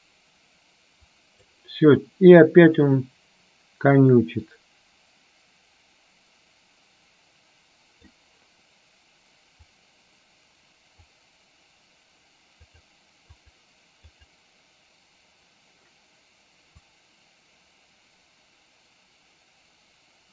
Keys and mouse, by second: 2.8-8.5 drag, 9.9-11.3 drag, 14.3 click, 17.3-20.3 drag.